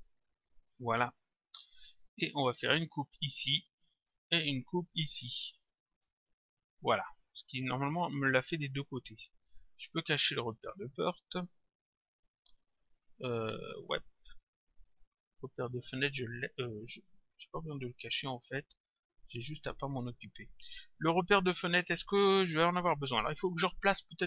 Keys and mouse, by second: 4.0 click, 5.9 click, 7.7 click, 10.5 click, 20.0 click.